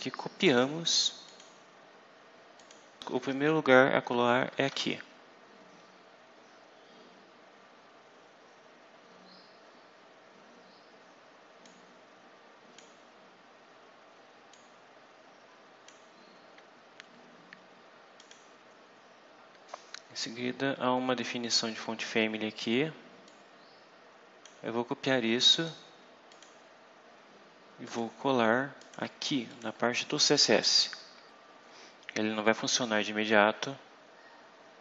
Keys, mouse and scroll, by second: 0.4 right click, 1.1 click, 2.5 click, 4.0 KP_Enter, 4.6 ctrl+v, 11.6-12.9 drag, 14.4-16.0 drag, 18.1 click, 19.4 scroll down 1, 23.2-24.5 drag, 26.3 click, 27.7 click, 28.7 click, 29.4 click, 30.4 ctrl+v, 31.3 Return.